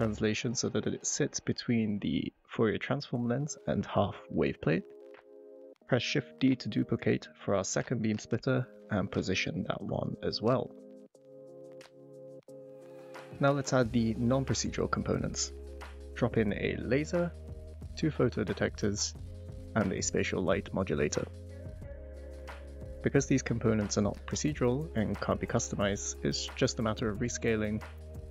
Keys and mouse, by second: 1.6 g, 2.0 y, 3.0 g, 3.1 x, 5.8 shift+click, 6.1 g, 6.3 x, 6.6 y, 8.0 click, 8.4-8.9 drag, 10.4-11.8 drag, 12.3 click, 13.6 click, 15.6 click, 16.4 shift+middle click, 17.3 r, 17.3 z, 17.3 9, 17.5 Return, 17.5 0, 18.3 shift+middle click, 18.6 middle drag, 19.4 s, 20.4 middle drag, 20.7 shift+middle drag, 21.1 s, 21.2 x, 25.2 shift+middle click, 26.0 click, 26.4 shift+middle click, 26.9 g, 27.0 y, 28.0 click.